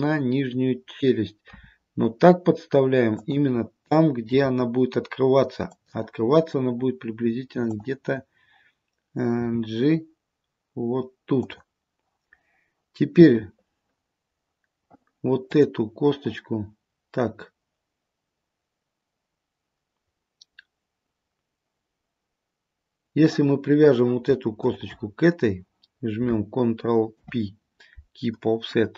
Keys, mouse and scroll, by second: 1.6 s, 4.4 g, 7.8 click, 9.5 g, 13.3-14.3 scroll up 1, 15.6 click, 24.7 shift+click, 27.3 ctrl+p.